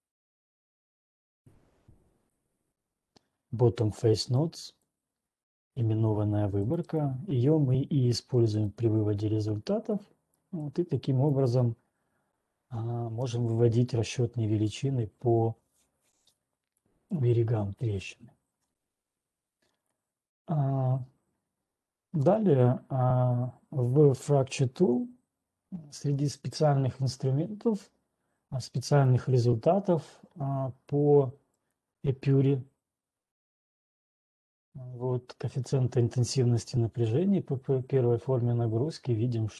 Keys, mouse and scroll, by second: 5.8 click, 7.6 right click, 8.8 right click, 10.0-10.7 scroll, 11.4 scroll, 13.4 scroll, 14.9 scroll, 17.5-17.9 scroll, 19.4-19.9 scroll, 22.2 scroll, 22.4-23.0 scroll down 5, 23.0 click, 29.5 click, 32.4 click.